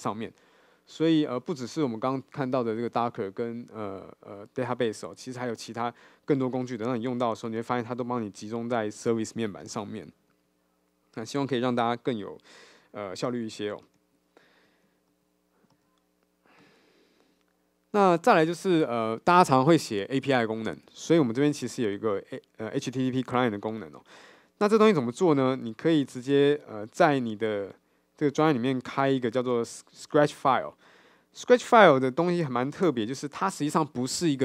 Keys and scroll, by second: 31.9 super+n, 33.0 shift+super+n.